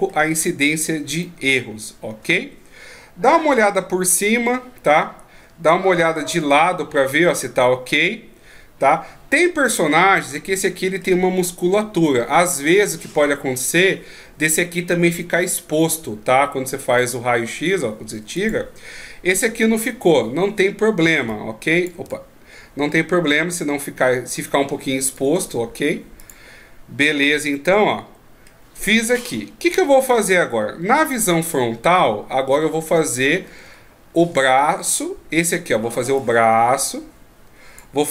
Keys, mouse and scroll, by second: 1.2 middle click, 3.5 KP_7, 4.8-6.0 scroll down 2, 6.0 KP_3, 10.3 middle click, 17.0 click, 18.4 click, 20.1-21.2 scroll down 1, 21.2 d, 21.4 click, 21.9 d, 22.0 d, 22.1 right click, 26.2 click, 27.5 middle click, 29.2-29.6 scroll up 3, 30.7 KP_1, 32.7-33.7 ctrl+scroll up 3, 33.7 shift+scroll down 2, 33.9 shift+scroll down 6, 36.1 d, 36.2 click, 37.8-38.1 d.